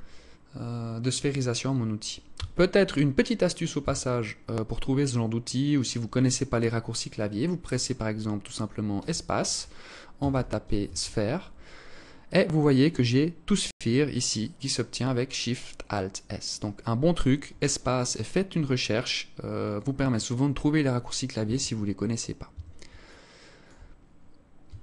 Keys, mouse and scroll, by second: 1.8 Tab, 3.2 Tab, 8.4 space, 16.8 space, 20.8 Tab, 21.8 Tab, 22.4 alt+click, 23.3-23.7 scroll up 4, 24.1 alt+shift+click.